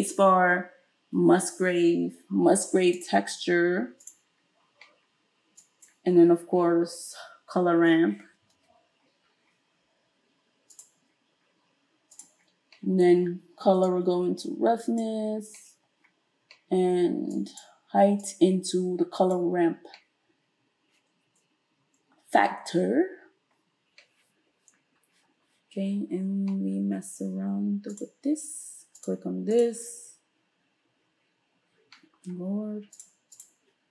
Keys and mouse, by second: 0.0 space, 5.6-12.3 drag, 8.0 space, 12.3-13.9 middle drag, 13.9-29.6 drag, 29.6-33.0 middle drag, 33.0 click, 33.4-33.9 middle drag.